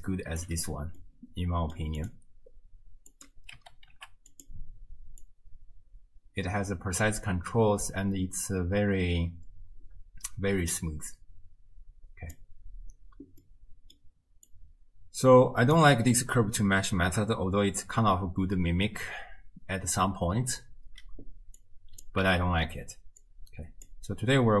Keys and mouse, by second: 0.5 d, 1.0-1.8 drag, 2.0 click, 2.1-3.1 middle drag, 3.1-4.5 drag, 4.5 middle click, 5.3-12.4 drag, 13.6 click, 14.6-15.8 drag, 21.7 click, 22.3 x, 23.2 click.